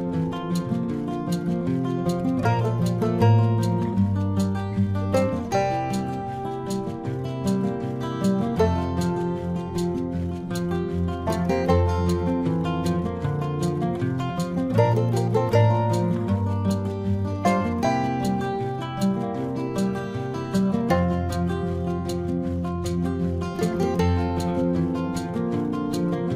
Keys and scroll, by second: 5.3 space, 7.2 space.